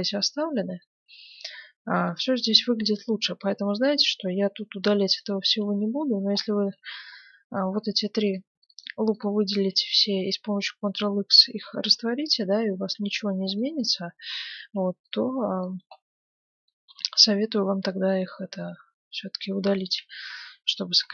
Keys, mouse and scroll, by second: 5.2 middle click, 5.6 Tab, 6.7 ctrl+Tab, 7.0-8.4 middle drag, 7.5 ctrl+Tab, 8.4-11.2 right drag, 11.6 Tab, 12.7-15.5 middle drag, 12.9 Tab, 14.6 ctrl+Tab, 15.5-17.2 right drag, 16.9 g, 17.3 middle click, 20.0 Tab, 20.5-21.1 middle drag.